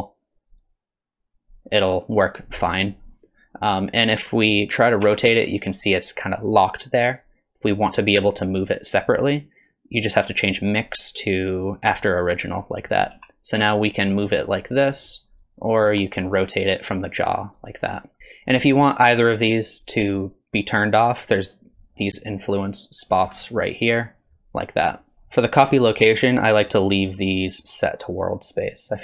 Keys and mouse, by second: 0.6-1.5 drag, 5.0 r, 10.7-11.9 drag, 13.2 r, 15.9 r, 22.6 click, 24.1 click.